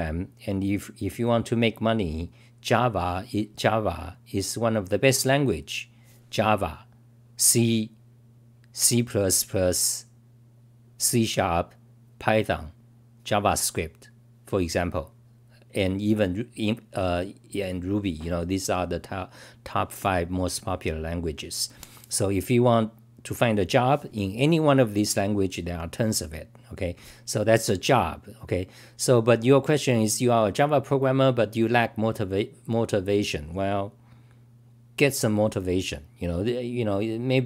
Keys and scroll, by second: 4.7 typing.